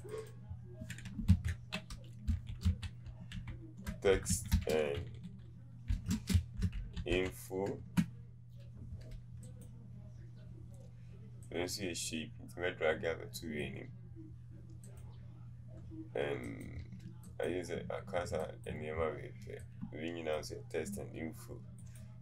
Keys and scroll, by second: 1.3 ctrl+a, 3.9-7.8 typing.